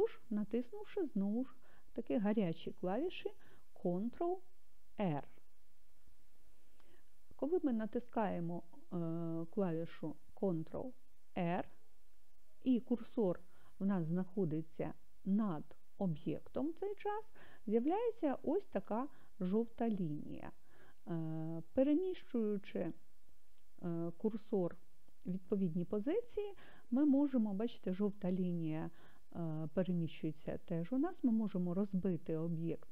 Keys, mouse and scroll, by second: 4.9 ctrl+r, 5.4-6.6 ctrl+r, 11.4 ctrl+r.